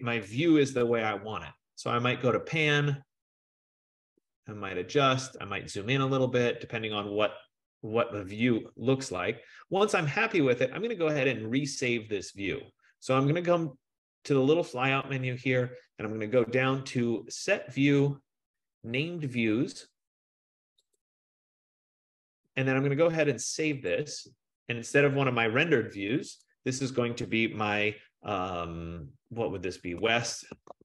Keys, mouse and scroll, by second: 0.5-2.9 typing, 5.3-10.3 drag, 11.9 click, 15.3-16.9 drag, 21.1-24.0 drag, 29.9-30.8 typing, 30.1 click.